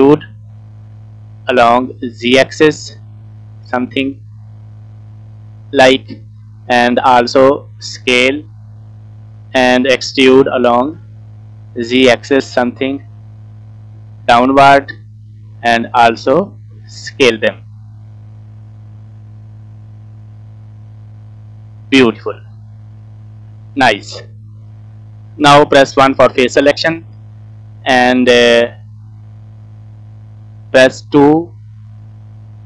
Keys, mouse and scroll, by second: 7.3 s, 10.1 e, 15.6 s, 22.3 middle click, 22.9 scroll up 2, 23.2 middle click, 23.9-24.3 scroll down 4, 24.2 middle click, 24.9-25.5 scroll up 2, 25.5-26.1 scroll down 2, 26.1 KP_1, 26.8 scroll up 3, 28.3 shift+middle click, 31.5 2, 32.0 scroll up 3, 32.4-32.6 scroll down 1.